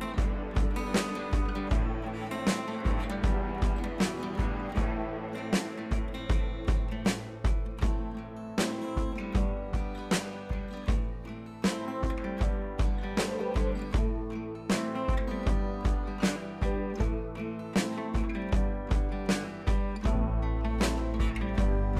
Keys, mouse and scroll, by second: 1.4-2.0 scroll down 1, 2.4-3.6 click, 3.5 right click, 4.2-4.8 shift+drag, 5.8-6.2 shift+drag, 9.2 right click, 10.0 shift+click, 12.0-12.4 shift+drag, 17.5 right click, 18.6-20.7 drag.